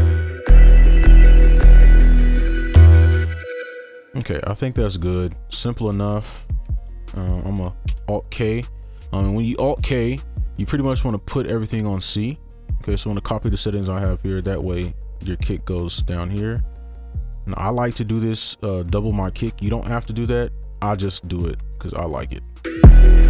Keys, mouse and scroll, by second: 3.2 space, 4.3 right click, 6.4 double click, 6.8 ctrl+a, 7.9 alt+k, 14.7 scroll down 1, 16.4 shift+click, 17.1 right click, 18.3 ctrl+click, 21.3 right click, 22.1 double click, 22.6 space.